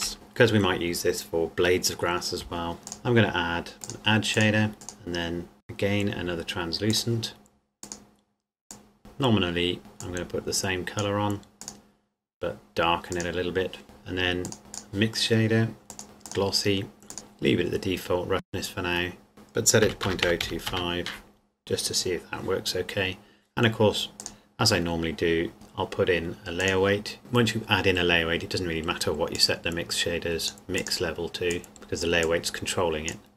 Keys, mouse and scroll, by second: 0.1 scroll up 1, 2.9 click, 6.9 click, 16.2 click, 19.3 click, 19.8 KP_Decimal, 20.0 KP_0, 20.3 KP_2, 20.4 KP_5, 20.7 KP_Enter, 24.2 click, 26.6 click, 29.3 click.